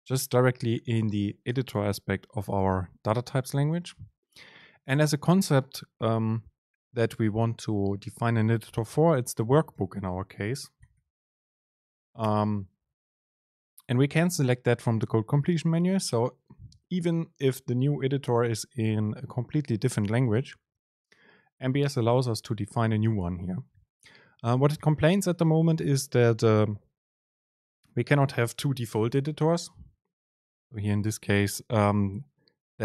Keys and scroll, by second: 4.9 super+space.